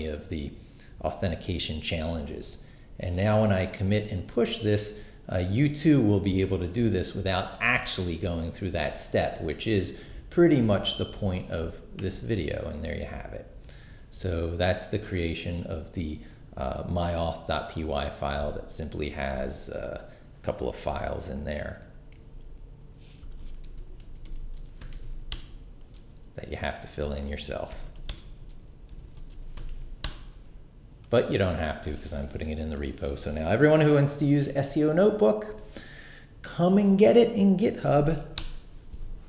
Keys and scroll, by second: 22.1 s, 23.2-25.3 typing, 27.5-30.1 typing, 38.0 shift+;, 38.2 shift+q, 38.4 Return.